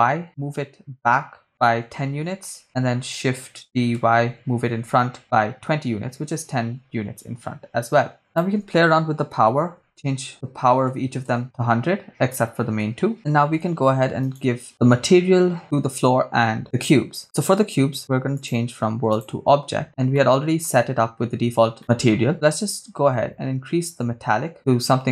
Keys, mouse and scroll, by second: 1.8 1, 2.0 0, 2.4 Return, 3.7-5.2 typing, 6.0 Return, 8.2-10.1 drag, 9.7 0, 10.3-11.4 drag, 10.3 right click, 11.0 0, 12.8 KP_0, 14.4 click, 14.4 right click, 18.3-19.2 drag, 19.8 scroll down 2, 20.1 middle click, 21.8 middle click, 22.3-25.1 drag.